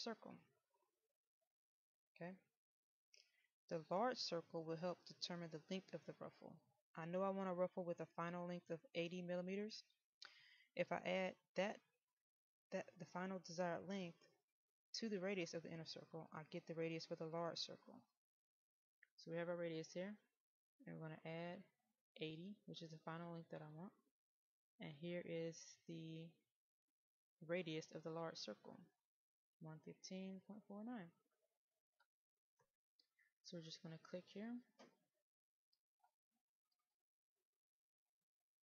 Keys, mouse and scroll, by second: 17.8 click.